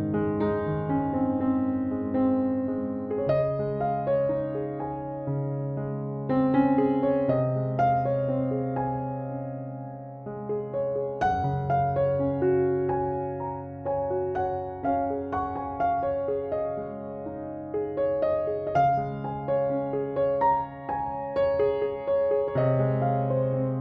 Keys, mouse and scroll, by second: 0.7 Right, 1.4 Down, 2.8 Right, 5.0 Down, 5.7 Left, 7.3 Down, 8.2 Left, 10.6 Down, 11.5 Left, 12.1 Right, 12.8 Left, 13.3 Down, 13.8 Left, 14.4 Right, 15.1 Down, 15.6 Left, 16.4 Right, 17.2 Up, 19.6 Up.